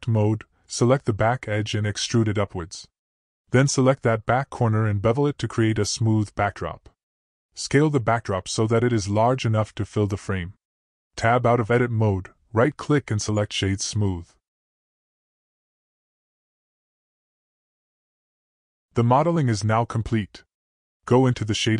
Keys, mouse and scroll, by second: 0.9 middle click, 2.5 click, 3.2 middle click, 5.2 ctrl+b, 9.6 middle click, 10.8 a, 12.1 s, 15.6 Tab, 17.7-18.2 drag, 18.8 click.